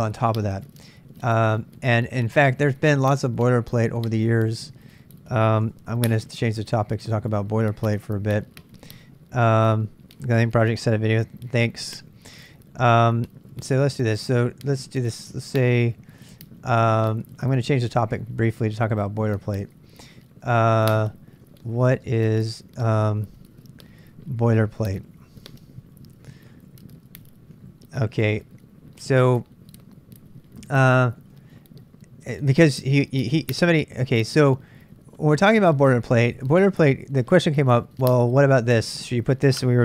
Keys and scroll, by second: 5.6 super+Tab, 7.2 Tab, 12.0 ctrl+[, 12.0 ctrl+j, 12.2-18.3 typing, 19.4-20.1 typing, 21.3-22.5 typing, 24.9-31.7 typing, 39.6-39.8 typing.